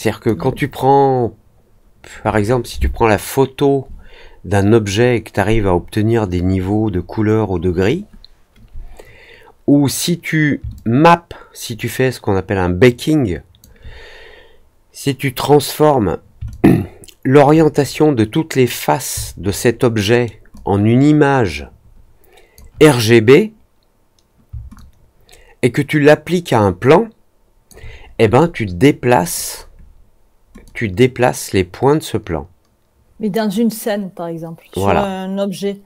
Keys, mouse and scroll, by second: 10.7-13.5 alt+drag, 16.4 alt+click, 19.5 alt+middle click, 20.5-22.5 alt+drag, 24.7-27.6 alt+drag, 30.6-35.8 drag.